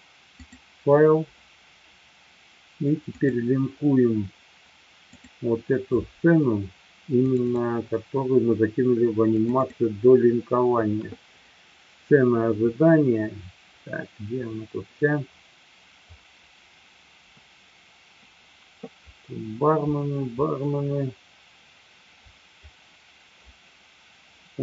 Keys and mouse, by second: 0.5-3.3 drag.